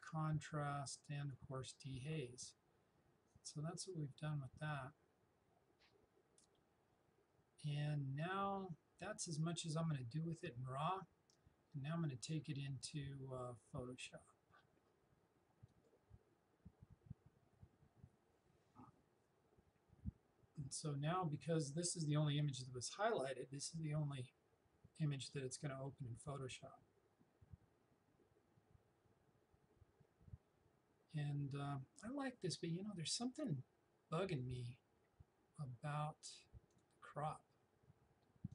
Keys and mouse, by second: 15.7 click, 36.7-38.5 drag.